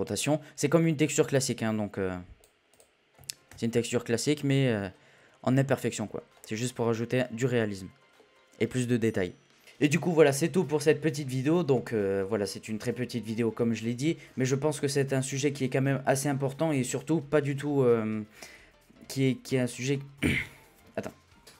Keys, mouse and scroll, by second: 4.2 scroll down 3, 4.4-4.8 middle drag, 4.8-6.4 scroll up 1, 6.4-9.6 middle drag.